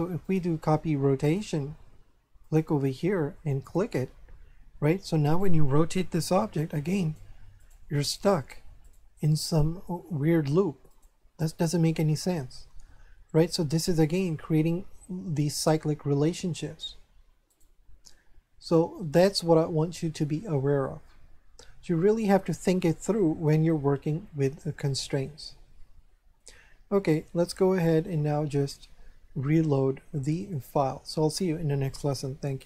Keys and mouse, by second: 0.2 click, 2.4 click, 3.6 click, 5.3 right click, 6.1 r, 7.0 right click, 7.9 r, 8.8 right click, 9.8 r, 11.2 right click, 17.5 right click, 19.1 click, 21.7 a, 23.8 shift+middle click, 27.5 click, 30.4 click.